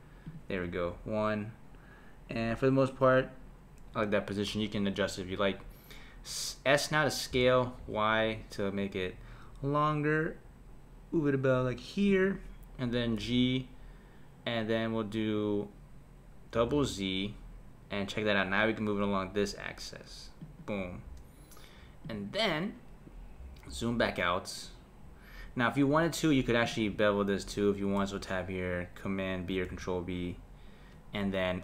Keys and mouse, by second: 0.6 KP_1, 3.2 middle click, 5.1 middle click, 7.3 s, 13.2 g, 22.0 click, 26.6 click, 28.0 Tab, 29.7 b.